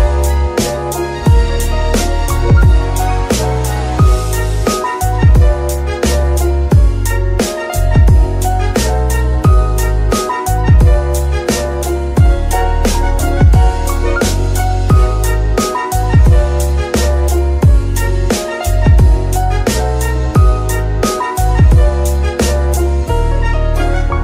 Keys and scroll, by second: 0.5 g, 2.0 Escape, 2.6 g, 3.1 Escape, 6.6 Escape, 7.5 g, 8.2 Escape, 9.4 g, 10.2 Escape, 11.3 g, 12.4 Escape, 16.2 r, 16.3 z, 18.9 r, 22.4 shift+r, 23.4 Escape.